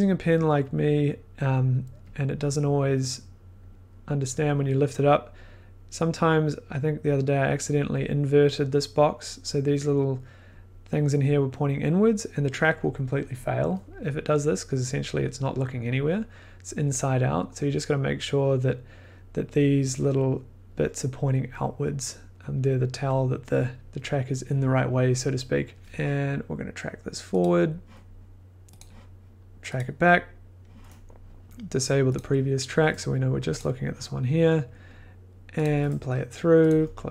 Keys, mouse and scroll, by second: 1.5 click, 8.9-13.9 drag, 19.0-22.7 drag, 22.7 middle click, 23.2 middle click, 23.5 scroll, 24.0 scroll, 27.4 click, 28.7 click, 29.7 click.